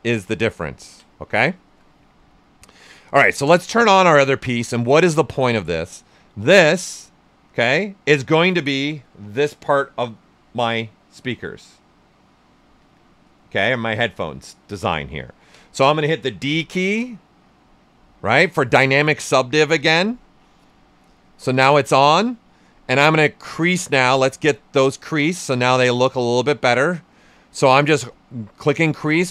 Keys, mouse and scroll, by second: 0.7 ctrl+right click, 3.4-5.5 drag, 5.9-11.9 right drag, 14.6 right click, 16.4 d, 16.8 right click, 19.2-23.6 drag, 24.4 right click, 26.4 shift+f.